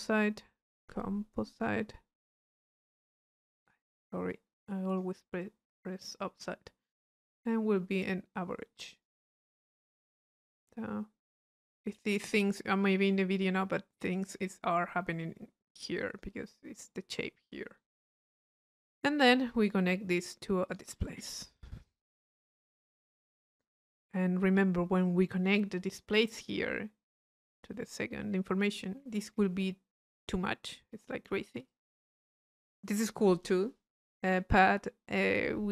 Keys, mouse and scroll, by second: 0.9 Delete, 1.6 click, 2.2 click, 2.9-4.0 drag, 4.3 click, 7.9 click, 9.0-10.3 drag, 10.3 middle click, 10.3-10.9 scroll up 1, 16.0 click, 18.5 click, 20.2 right click, 20.7 click, 21.6 i, 22.9-24.1 drag, 30.2-32.6 drag.